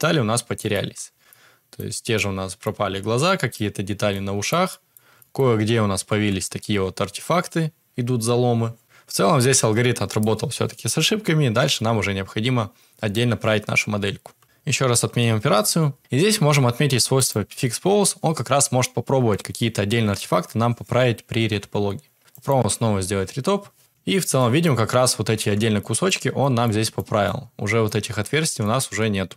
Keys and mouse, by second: 0.5 middle click, 0.8 Tab, 1.3 middle click, 2.1 middle click, 2.8 Tab, 3.2-3.5 middle drag, 4.1-4.5 middle drag, 4.6 middle click, 5.1 shift+middle click, 6.1 Tab, 14.4 ctrl+z, 17.1 click, 17.1 middle click, 24.3-24.6 shift+middle drag, 25.7 shift+middle drag, 26.3 middle drag, 26.8 shift+middle click, 27.2 middle click, 28.6 middle click, 28.8 Tab.